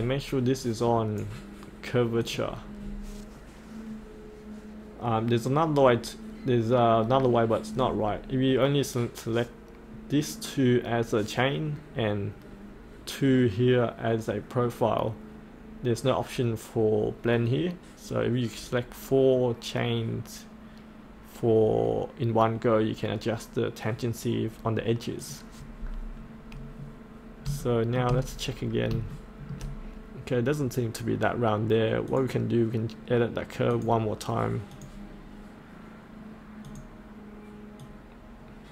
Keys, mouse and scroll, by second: 0.6-2.1 right drag, 2.2 click, 2.8-3.6 scroll up 1, 9.2-12.9 scroll up 1, 25.2 click, 26.2 scroll up 1, 27.6 shift+middle click, 28.3-28.9 scroll down 1, 29.1 shift+middle click, 29.7-32.1 scroll up 1, 32.1-38.7 drag.